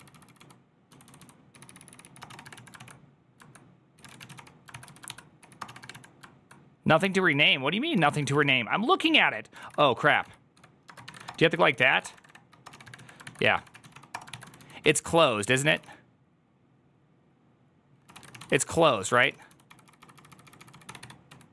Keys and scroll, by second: 0.0-16.1 typing, 17.5-21.5 typing.